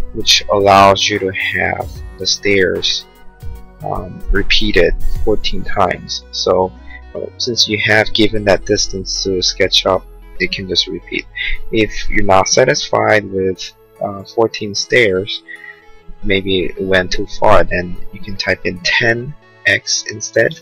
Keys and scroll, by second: 0.5 Return, 19.0-20.2 typing.